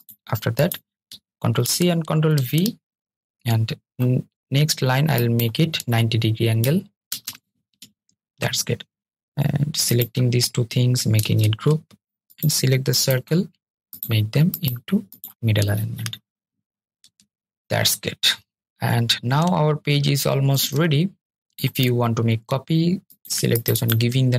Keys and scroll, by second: 0.7 super+c, 1.4 super+v, 2.7 super+v, 10.2 super+g, 11.5 super+g.